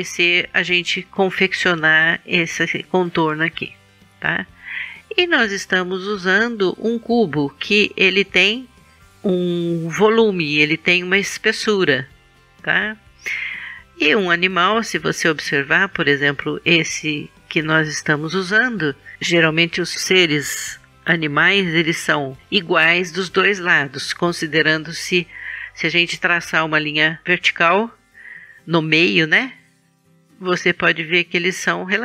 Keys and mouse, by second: 12.2-13.7 middle drag, 17.5 KP_1.